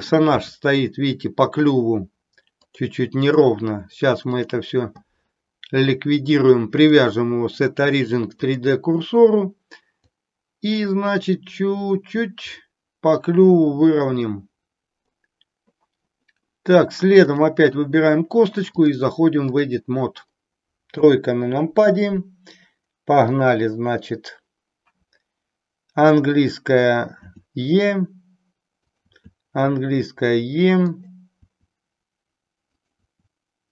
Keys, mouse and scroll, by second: 2.7-3.4 drag, 4.3 click, 6.8-8.6 drag, 10.0-15.2 drag, 17.3 click, 18.8-19.6 drag, 20.9 KP_3, 23.2 click, 27.1 e, 28.8 click, 29.1 e, 30.9 click, 31.4 e, 33.1 e.